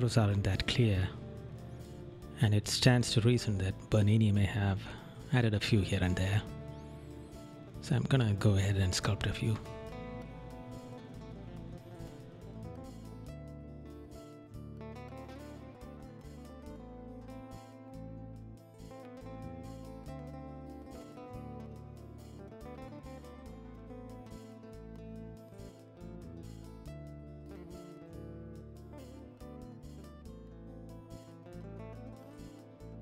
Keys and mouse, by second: 1.8 right click, 3.3 right click, 4.4 right click, 5.5 right click, 6.8 right click, 8.0 right click, 9.7 right click, 10.5 right click, 11.2 right click, 13.0 right click, 14.5 right click, 16.3 right click, 17.2 right click, 17.8 right click, 19.4 right click, 20.3 right click, 22.6 right click, 23.3 right click, 24.4 right click, 26.3 right click, 26.6 right click, 28.7 right click, 30.0 right click, 32.2 right click, 32.8 right click.